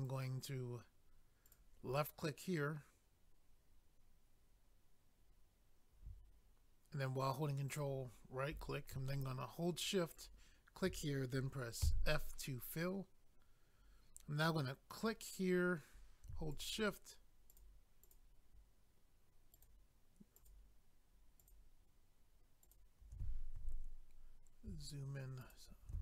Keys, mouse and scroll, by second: 1.4 click, 7.7 ctrl+right click, 10.1 shift+click, 14.9 click, 16.5 shift+click, 17.5 shift+click, 18.0 shift+click, 18.1 shift+double click, 19.5 shift+click, 20.4 shift+click, 21.4 shift+click, 21.5 shift+click, 22.6 shift+click, 22.7 shift+click, 24.0 scroll up 1, 25.4 shift+click, 25.5 shift+click.